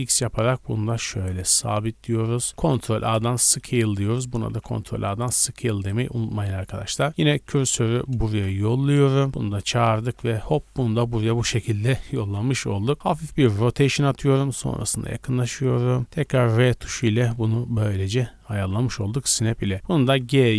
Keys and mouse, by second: 2.6 ctrl+a, 4.0 click, 4.4 ctrl+a, 6.4-7.5 shift+middle drag, 7.1 Tab, 7.3-9.9 typing, 7.5 click, 7.6-9.4 middle drag, 8.6 Tab, 12.1 KP_1, 13.4 middle click, 13.4 r, 14.8 shift+click, 15.0-20.5 shift+middle drag, 16.1 r, 18.5 z, 20.0 g.